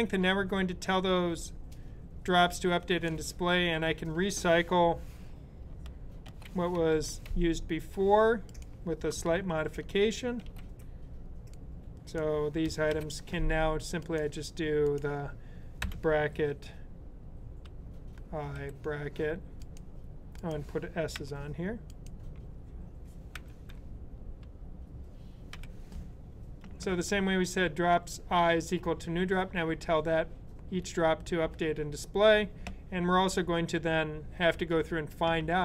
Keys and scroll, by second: 6.1 super+c, 6.8 super+/, 10.2 super+v, 12.8 super+], 15.7 [, 18.2-19.0 typing, 21.0 s, 23.0-24.3 typing, 25.4 typing.